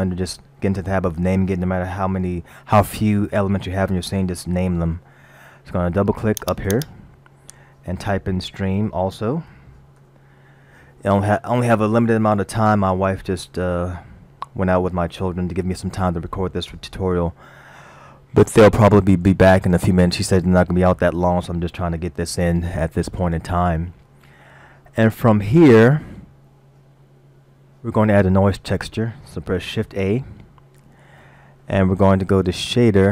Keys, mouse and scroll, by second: 6.4 click, 6.8 click, 19.4 middle click, 23.6-25.0 scroll up 3, 25.6-26.4 scroll up 5, 30.1 shift+a.